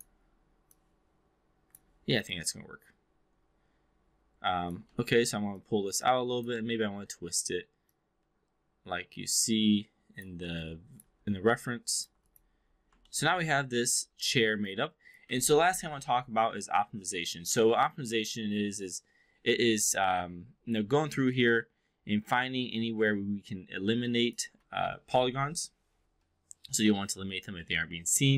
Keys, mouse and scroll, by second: 0.6-1.6 drag, 2.3-4.8 alt+drag, 4.9 w, 5.5-6.5 drag, 6.5 e, 7.8-10.1 drag, 10.6-11.0 alt+drag, 11.5 alt+middle drag, 11.9 alt+drag, 13.0 alt+middle drag, 14.0 alt+middle click, 14.5-15.1 alt+drag, 21.3-24.4 alt+drag.